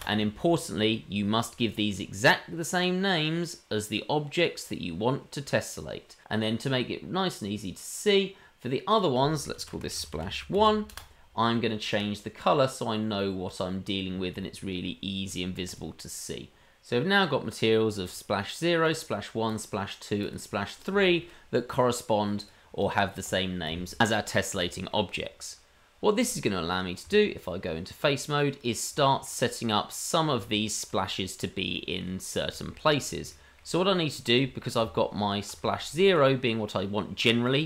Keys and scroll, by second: 27.0 Tab, 34.8 Tab, 37.5 Tab.